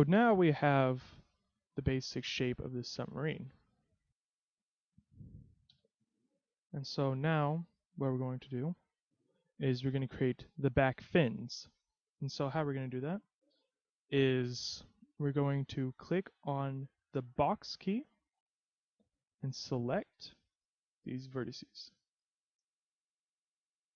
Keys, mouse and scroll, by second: 1.0-1.3 scroll down 2, 1.3 z, 1.6 middle click, 5.9 KP_3, 6.9 scroll up 1, 7.5 shift+middle click, 8.3 scroll up 1, 8.6 z, 9.2-9.9 scroll up 1, 9.9 a, 12.6 middle click, 14.7 KP_3, 17.3 b.